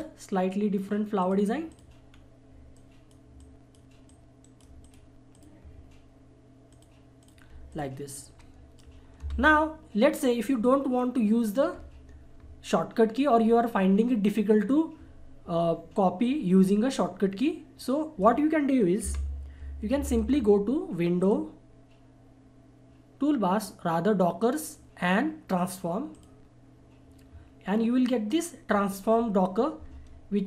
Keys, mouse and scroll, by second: 1.2 click, 2.1-2.7 scroll down 1, 2.7-4.4 drag, 4.4 right click, 5.5 click, 9.2 Delete, 17.8 click, 19.0 Delete, 19.9 F4, 21.2 click, 21.2 click, 26.1 click.